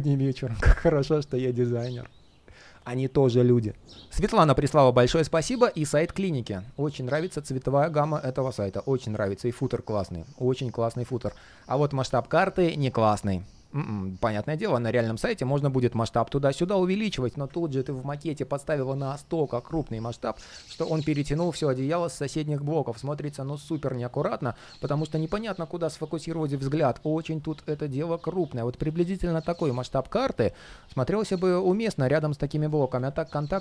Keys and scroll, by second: 32.8 super+z.